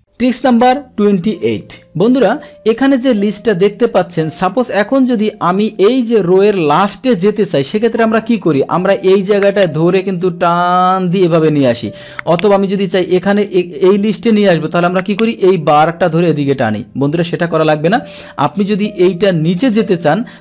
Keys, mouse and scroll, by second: 2.9 click, 4.1-5.2 drag, 9.3-12.5 drag, 13.4 click, 14.2 click, 15.4-17.1 drag, 17.6 click, 18.5 click.